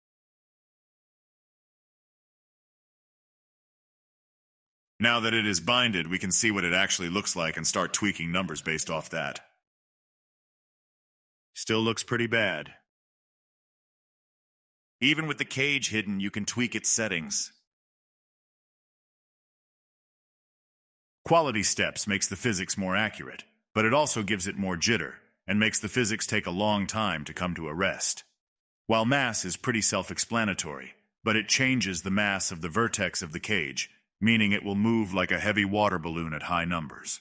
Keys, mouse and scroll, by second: 1.3 click, 3.6 click, 6.5 click, 7.3 click, 7.8-8.2 middle drag, 8.2 click, 8.4-9.1 middle drag, 9.1 space, 9.9-13.0 middle drag, 13.0 scroll down 1, 13.1-15.6 middle drag, 15.6 space, 16.0-18.1 middle drag, 18.1 click, 19.1 click, 23.1 scroll down 2, 31.1-33.2 drag, 33.2 middle click, 33.9-34.3 drag, 34.3 space.